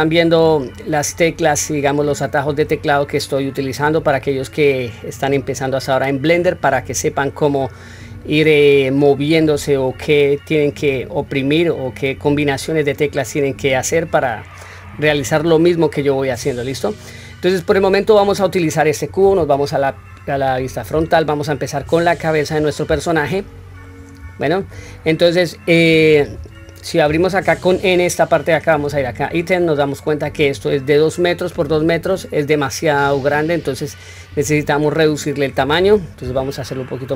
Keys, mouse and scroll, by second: 4.4-6.5 middle drag, 8.2-9.6 middle drag, 10.7 middle click, 11.6-12.9 middle drag, 16.7 middle click, 18.1 click, 19.2 KP_1, 20.3-20.9 scroll up 1, 20.9 scroll up 1, 21.2-21.5 shift+middle drag, 22.1 scroll down 2, 23.2-23.9 shift+middle drag, 28.8 click.